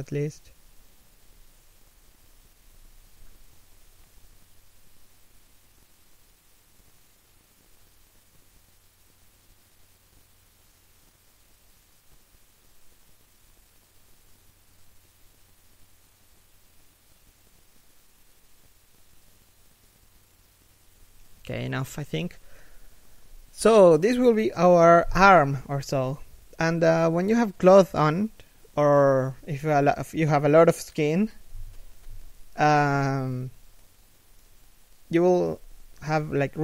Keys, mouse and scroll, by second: 2.2 alt+right click, 2.6 r, 5.1 a, 5.5 g, 6.9 r, 7.7 a, 7.9 right click, 8.6 alt+right click, 8.9 g, 11.6 right click, 11.9 scroll up 1, 12.3 g, 13.5 right click, 13.7 g, 15.0 right click, 15.2 g, 17.0 right click, 17.9 shift+right click, 18.1 g, 19.4 right click, 19.7 shift+right click, 19.9 g, 21.3 a, 23.4 z, 24.7 scroll down 1, 24.9 z, 25.8 shift+middle click, 26.2 scroll up 1, 29.6 z, 31.0 z, 34.0 shift+right click, 34.5 g, 36.3 a.